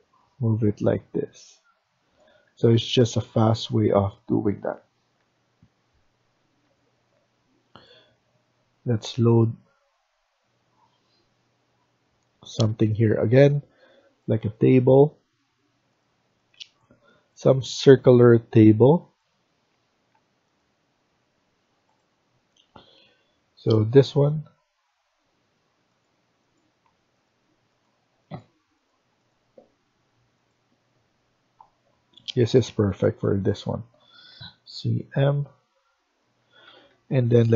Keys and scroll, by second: 2.2 Escape, 4.5 Left, 5.1 Down, 6.3 Escape, 6.5 Escape, 34.2-34.7 typing, 36.3 Escape, 36.5 Escape, 36.7 Escape.